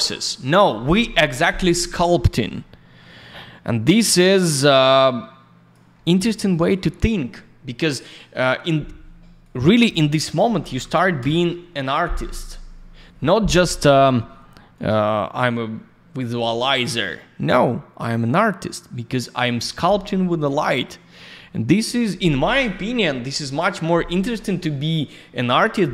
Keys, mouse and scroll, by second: 3.7 click, 3.8 click, 4.0 ц, 4.5 click, 6.5 click, 6.6 click, 9.4 click, 10.4 1, 11.2 Return, 14.7 click, 18.1 click.